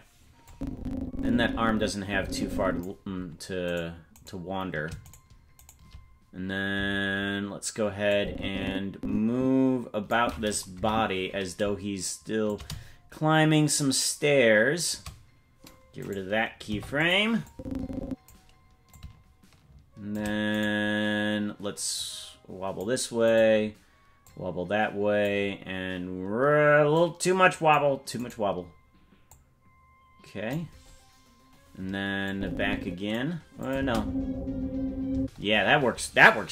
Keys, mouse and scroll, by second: 0.5-2.9 drag, 4.2 right click, 5.2 shift+right click, 8.1-10.2 drag, 10.8 Right, 12.5-15.0 shift+drag, 16.0 right click, 16.7 Delete, 17.5 click, 18.9-20.2 shift+drag, 20.6 right click, 22.0 click, 23.4 right click, 24.2-25.3 drag, 26.9 click, 28.3 right click, 29.3-30.6 drag, 32.3 click, 33.6 click, 33.8 space, 35.1 space.